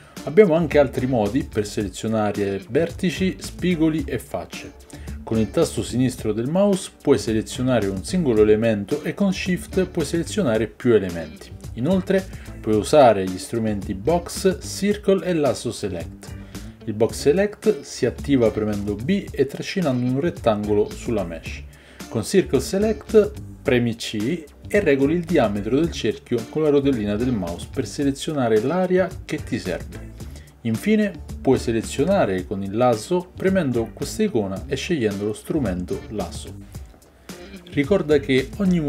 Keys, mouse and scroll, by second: 10.5 b, 13.4 a, 13.7 a, 15.6 b, 20.1 a, 20.3 a, 24.3-27.3 middle drag, 24.3 c, 32.7 ctrl+click, 33.4 ctrl+z, 33.4-36.1 ctrl+middle drag, 36.1-38.8 drag.